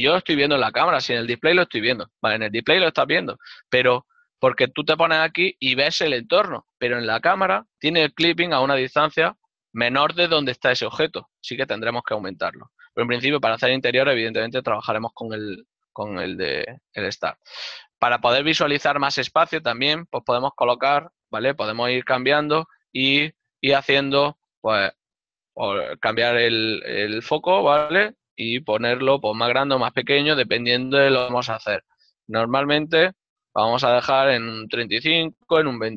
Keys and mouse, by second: 4.8 middle click, 7.8 KP_0, 21.8 Return, 21.8 KP_Enter, 23.4 click, 24.7 KP_2, 24.9 Return, 28.6 click, 28.7 KP_0, 29.0 Return, 34.0 KP_3, 34.6 KP_5, 34.7 Return.